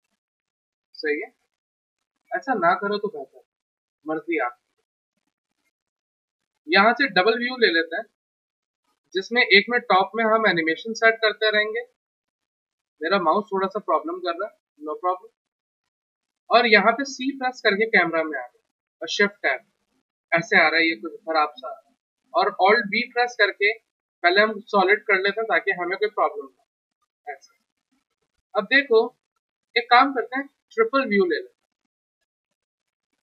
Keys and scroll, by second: 14.9 g, 17.0 c, 18.7 f, 22.9 alt+b.